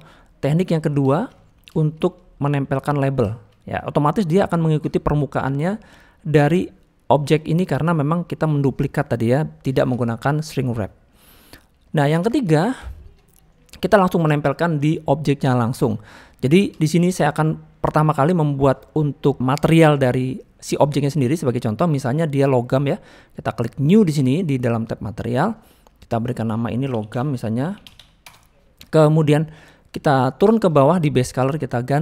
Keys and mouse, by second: 1.1 shift+middle click, 1.3 middle click, 1.7 shift+middle click, 2.0 click, 2.4 middle click, 3.2 shift+middle click, 4.4 middle drag, 5.5 middle drag, 7.1 click, 7.8 middle click, 8.1 click, 9.7 shift+middle click, 11.9 shift+middle click, 12.3 click, 12.9 shift+middle drag, 13.5 middle click, 16.8 shift+middle click, 25.3 click, 26.2-28.3 drag, 31.8 click.